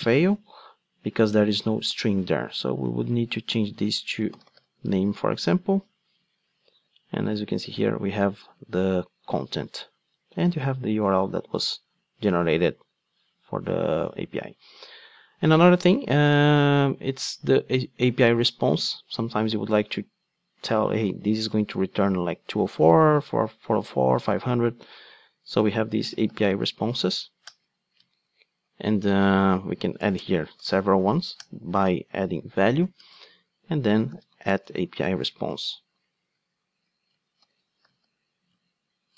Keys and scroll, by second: 27.5 Return, 35.6 Return.